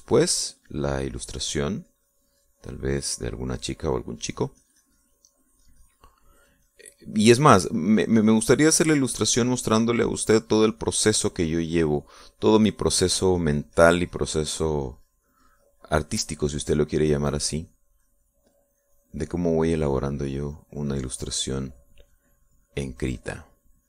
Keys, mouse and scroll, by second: 5.2-6.9 drag, 7.0-8.8 drag, 8.9-11.8 drag, 11.9-13.5 drag, 14.8-20.3 drag.